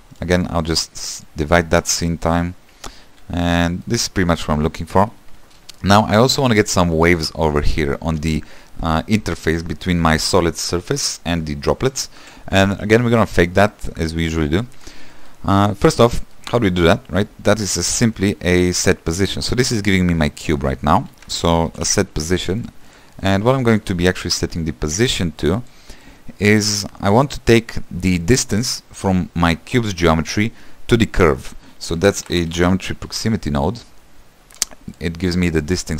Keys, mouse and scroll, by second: 0.4 q, 1.8 click, 2.3 space, 3.0 middle click, 3.8 scroll down 2, 4.0-6.7 middle drag, 6.7-7.3 scroll up 4, 12.5 space, 12.8 =, 13.2-13.7 scroll down 3, 23.2 s, 35.1 shift+a.